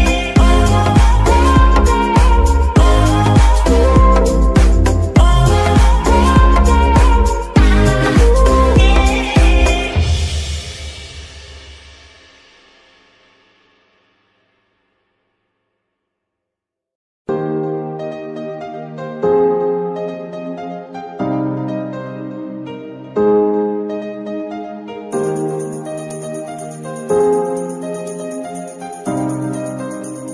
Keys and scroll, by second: 0.0-0.3 typing, 5.3 g, 5.6 Escape, 6.2 KP_3, 7.2 z, 7.8 g, 20.6 g, 22.0 Escape, 24.4 g, 27.2 r, 27.4 r, 28.7 g, 29.3 Escape, 30.1 ctrl+z.